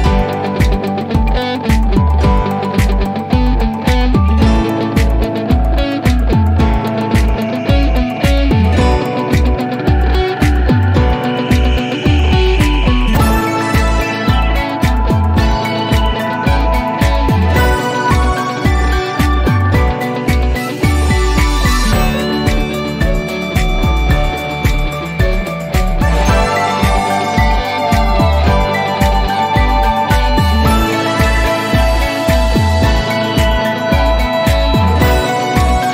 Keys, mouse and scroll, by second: 1.1 click, 3.1-4.3 typing, 5.6 click, 8.1 click, 8.2 click, 12.1 click, 14.6 click, 19.0 click, 23.3 click, 26.0 click, 30.1 click, 33.8 click, 33.8 click, 35.6 click.